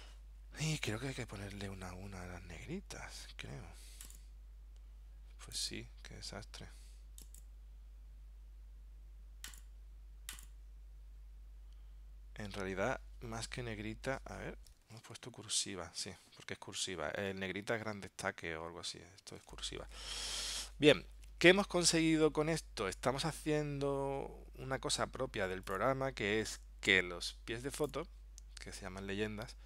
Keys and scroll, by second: 15.1 super+Tab, 19.5 super+Tab.